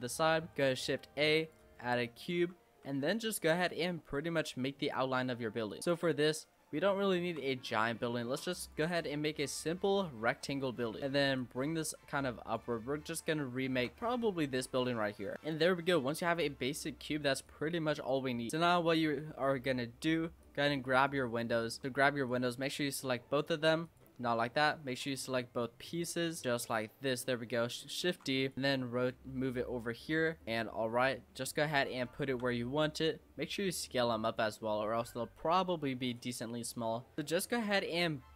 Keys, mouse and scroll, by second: 0.4 shift+a, 1.7-2.3 scroll down 4, 2.3 Tab, 2.8 s, 4.4 click, 5.7 click, 5.8 s, 6.6 scroll down 4, 6.9 shift+middle click, 7.5 s, 9.0-9.6 scroll up 4, 9.6 click, 10.7 click, 11.0 middle click, 11.4 click, 12.8-13.4 scroll down 4, 13.4 shift+middle click, 14.0-15.3 scroll up 6, 15.3 middle click, 16.3 Tab, 17.5 click, 18.4 middle click, 18.5 click, 18.5-19.0 scroll up 4, 19.0 shift+middle click, 19.6 scroll up 1, 19.6 middle click, 20.4 drag, 21.6 click, 22.3 click, 23.8 click, 24.1 middle drag, 24.4-25.0 scroll up 1, 25.0 click, 25.9 shift+click, 28.0 shift+d, 28.5 click, 29.5 click, 30.4 click, 30.5-31.1 shift+middle drag, 31.1 g, 32.0-33.5 shift+middle drag, 33.5 s, 35.0 click, 37.1 click, 37.4 shift+middle click, 37.8 s.